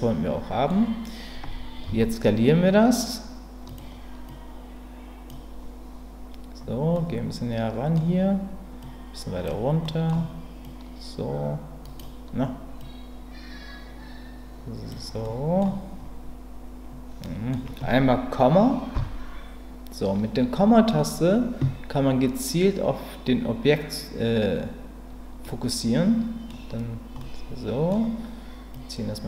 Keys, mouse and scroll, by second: 1.8 s, 3.6 click, 4.3-5.3 drag, 6.9-7.9 middle drag, 8.8 click, 9.8 middle click, 10.6-12.0 drag, 12.8-14.9 drag, 15.2 middle click, 17.2 middle click, 18.9 KP_Decimal, 25.4-26.5 middle drag, 27.2 middle click, 28.8-29.2 drag.